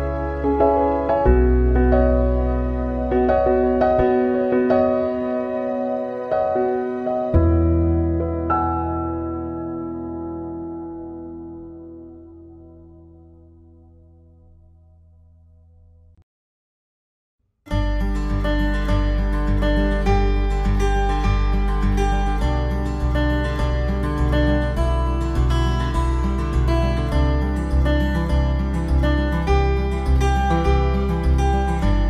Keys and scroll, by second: 7.7 ctrl+0, 14.8 ctrl+=, 23.7 ctrl+z, 25.3 ctrl+z, 28.0 ctrl+z.